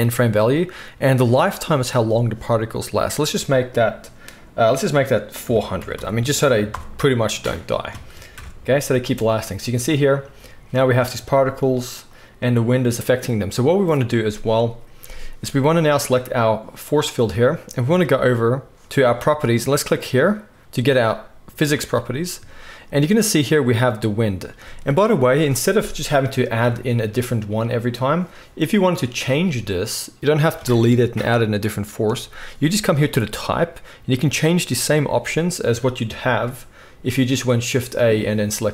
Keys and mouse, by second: 5.9 0, 8.3 shift+Left, 9.0 space, 12.1-20.1 drag, 20.6 space, 26.7 shift+a, 28.9 click, 33.2 right click, 33.3 click, 36.1 shift+middle click, 36.1 shift+right click, 36.1 shift+a.